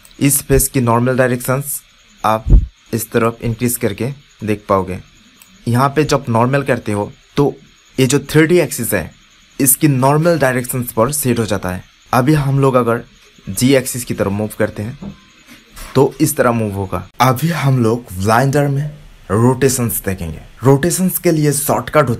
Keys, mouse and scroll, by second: 13.6 click, 16.1 click.